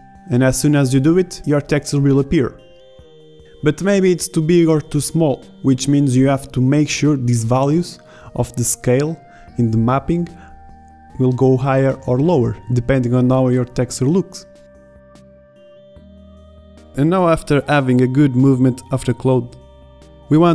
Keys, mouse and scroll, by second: 2.8 Tab, 17.3-18.6 drag, 18.6 ctrl+z.